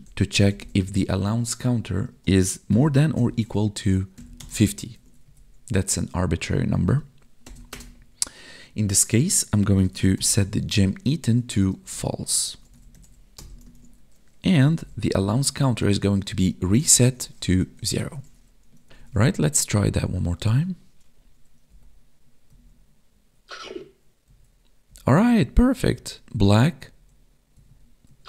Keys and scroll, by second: 1.0 Tab, 2.1 space, 5.0 ctrl+s, 5.2 Right, 10.9 Tab, 11.5 space, 11.8 space, 13.7 ctrl+s, 15.6 Tab, 16.3 space, 17.1 space, 18.1 ctrl+s, 19.1 Tab, 21.7 Up, 22.5 Left, 23.3 Down, 24.3 Right, 24.9 Down, 25.4 Left, 25.9 Down, 26.2 Up, 26.9 Left, 27.6 Down, 28.1 Left.